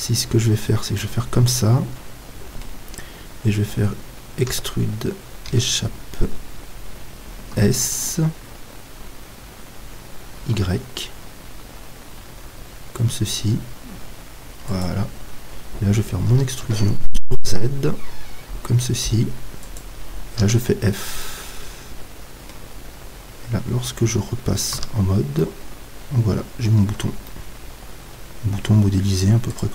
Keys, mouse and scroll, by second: 1.0-2.9 middle drag, 4.6 e, 7.5 s, 14.8-23.9 drag, 16.3 e, 20.4 f, 21.2-23.9 middle drag, 24.7 z, 25.4 middle click, 26.9 Tab, 27.2 middle click, 27.8-29.7 middle drag.